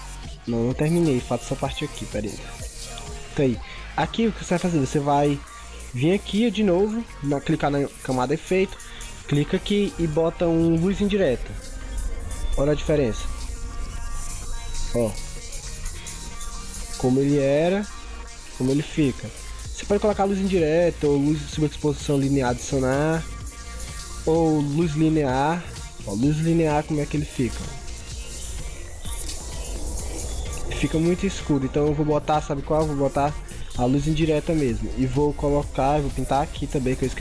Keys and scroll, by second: 4.7 ctrl+0, 5.2 ctrl+=, 5.8 ctrl+=, 14.5 ctrl+0, 29.1 ctrl+0, 29.6 ctrl+=.